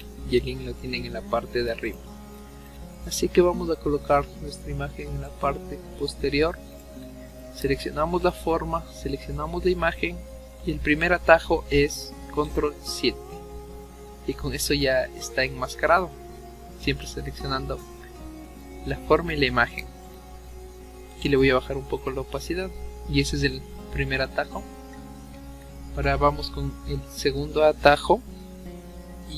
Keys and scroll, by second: 12.5 ctrl+7.